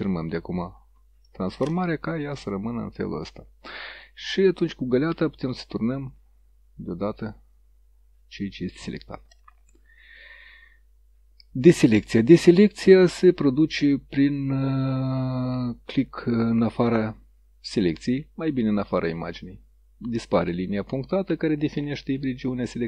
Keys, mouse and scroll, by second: 0.1 Return, 5.0 click, 6.1 click, 14.9 click, 19.0 click, 20.5-21.6 middle drag.